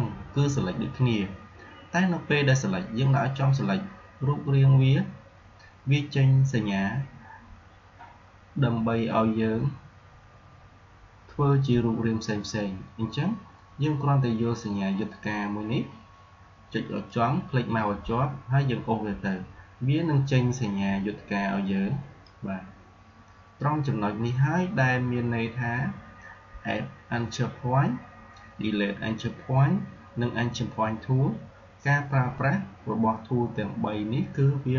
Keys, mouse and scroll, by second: 17.0-24.6 drag.